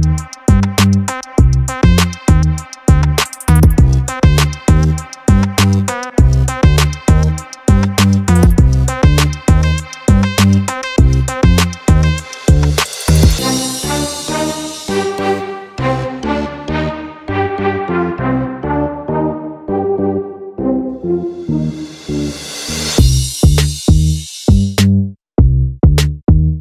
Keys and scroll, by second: 13.4 ctrl+-, 13.8 ctrl+-, 13.9 ctrl+-, 14.1 ctrl+-, 15.0 ctrl+=, 15.1 ctrl+=.